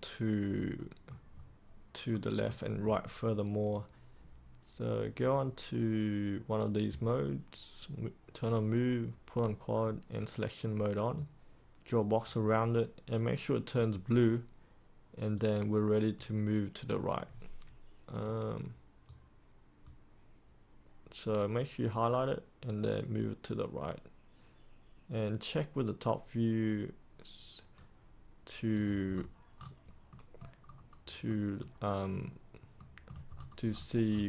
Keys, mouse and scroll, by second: 1.3-2.1 scroll up 1, 2.1-3.1 middle drag, 11.1-12.2 right drag, 12.3 right click, 14.1-15.3 scroll up 1, 15.3 click, 19.0-20.4 right drag, 21.8-28.5 drag, 29.1-30.0 scroll down 1, 30.0 middle click, 30.6-31.2 scroll down 1, 31.2-32.5 middle drag, 33.2 scroll up 1.